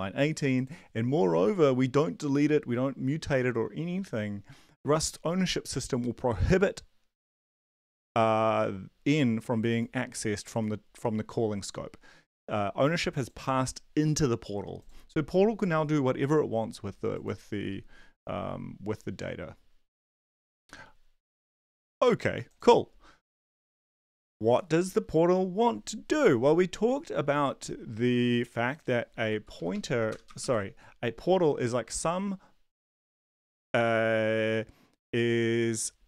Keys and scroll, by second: 29.5 Up, 29.7 Up, 30.1 Return, 30.2 Return, 30.4 Up.